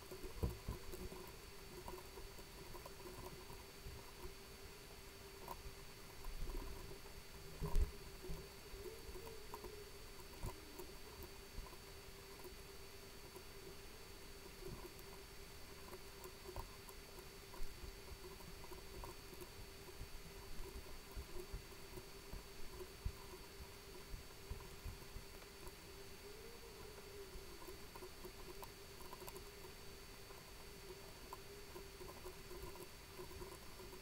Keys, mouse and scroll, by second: 0.0-3.7 typing, 0.4 click, 0.7 click, 0.8 ctrl+v, 0.9 click, 1.5 click, 1.9 KP_Subtract, 2.0 ctrl+v, 3.6-4.0 ctrl+scroll up 6, 4.0 right click, 4.1 shift+right click, 4.5 click, 5.1 click, 5.3-6.5 scroll up 4, 5.4 click, 5.5 KP_0, 5.8 right click, 6.1 shift+middle click, 6.6 shift+right click, 7.2 right click, 7.6 click, 7.7 KP_Subtract, 7.9 scroll down 2, 8.0-11.3 typing, 8.1 right click, 8.6 click, 8.8 right click, 10.0 click, 10.1 right click, 11.1 click, 11.4 click, 11.8 ctrl+v, 11.9 click, 12.3 click, 12.8 click, 13.3-15.2 typing, 15.6 click, 15.8 click, 16.0 ctrl+c, 16.1 click, 16.5 click, 16.5 ctrl+v, 16.8 right click, 17.2 Tab, 17.3 right click, 17.9-19.4 typing, 19.6 click, 20.4 right click, 20.7 alt+m, 20.8 click, 20.9 right click, 21.3 shift+right click, 21.5 click, 21.6 scroll down 1, 21.7 right click, 21.8 shift+right click, 22.1 click, 22.2 right click, 22.4 shift+right click, 22.5 scroll up 1, 22.9 click, 23.1 right click, 23.4 alt+shift+right click, 23.8 shift+right click, 24.0 x, 24.1 click, 24.1 scroll down 1, 24.4 right click, 24.5 scroll up 1, 24.8 alt+shift+right click, 24.9 shift+right click, 25.1 x, 25.2 scroll down 1, 25.3 click, 25.7 a, 25.9 click, 26.2 click, 26.6 click, 27.5 click, 27.8 ctrl+c, 27.8-29.7 typing, 28.8 click, 29.5 click, 29.8 middle click, 29.9 scroll up 2, 30.1 click, 30.2 right click, 30.4 shift+right click, 30.5 middle click, 30.6 shift+right click, 30.7 middle click, 31.0-34.0 typing, 31.0 click, 31.2 scroll down 2, 31.2 middle click, 33.0 scroll down 1.